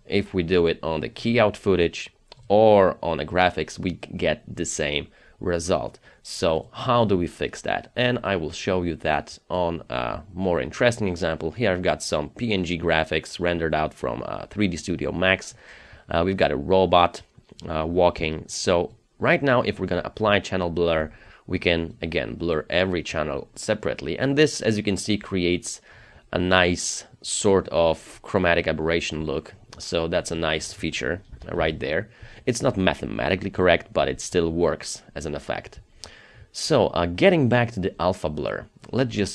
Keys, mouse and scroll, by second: 25.6-27.1 scroll up 1, 31.3 KP_0, 31.6 Return.